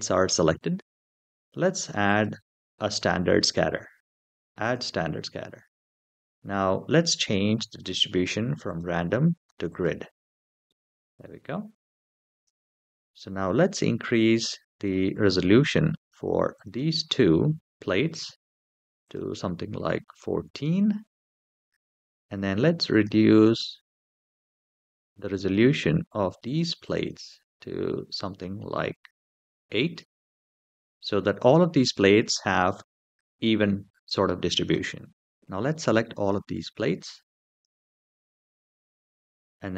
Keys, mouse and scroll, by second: 1.8 click, 4.4 click, 8.4-9.6 drag, 10.4-11.0 middle drag, 11.8-12.2 shift+middle drag, 12.5-13.1 scroll up 2, 15.6 click, 16.3 shift+click, 18.8-20.1 drag, 22.7 click, 23.7 shift+click, 24.5 shift+click, 25.7 shift+click, 26.2 shift+click, 26.6 shift+click, 27.9-29.3 drag, 31.3-32.5 middle drag, 35.8 shift+middle drag, 36.2-36.8 scroll down 2, 36.8-37.4 drag, 38.8-39.4 scroll down 3.